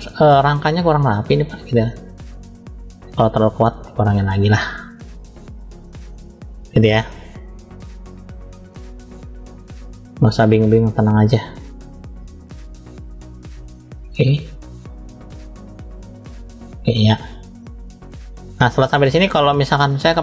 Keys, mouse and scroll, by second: 0.4 click, 3.3 click, 4.4 click, 6.0-7.2 middle drag, 7.6 click, 9.8 middle click, 10.7 click, 12.8 click, 13.5-15.7 drag, 16.0 click, 16.3 click, 17.1 click, 17.3 click, 18.7 middle click.